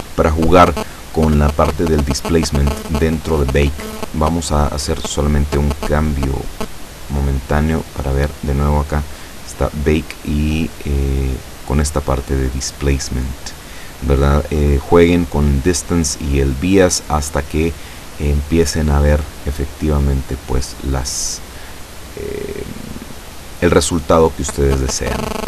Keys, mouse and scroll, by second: 5.3 click, 6.6 click, 7.5-8.2 scroll down 3, 9.7 click, 11.5 click, 12.2-12.8 scroll down 2, 13.2-13.5 scroll down 1, 20.0-20.5 scroll down 2, 20.8-21.1 scroll down 2, 21.1-23.3 middle drag, 23.3-23.8 scroll up 4, 23.8-25.4 middle drag.